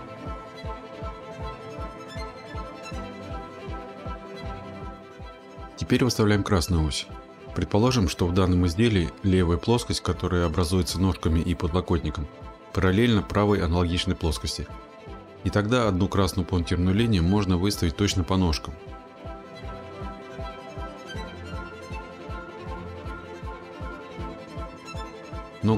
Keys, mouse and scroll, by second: 2.5 click, 3.8-4.6 scroll, 15.2 click, 19.6 click, 20.6-21.4 scroll, 24.3 click, 24.6 scroll.